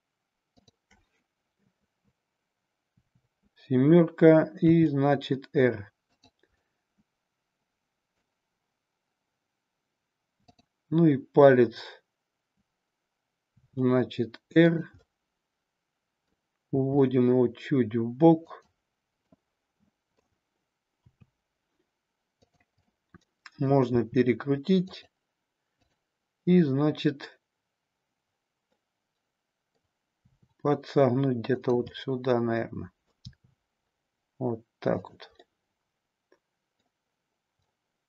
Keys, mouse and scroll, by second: 2.9 KP_7, 4.7 r, 6.7-8.3 middle drag, 10.4-12.9 drag, 13.4 r, 14.7 click, 14.9-16.3 middle drag, 16.8 r, 19.3 middle click, 21.1 r, 22.8-23.7 middle drag, 23.9 r, 24.9 click, 25.8-28.3 drag, 28.8-29.9 middle drag, 30.2 r, 31.9-33.1 middle drag, 33.3 r, 35.4-36.8 middle drag, 37.7-38.0 middle drag.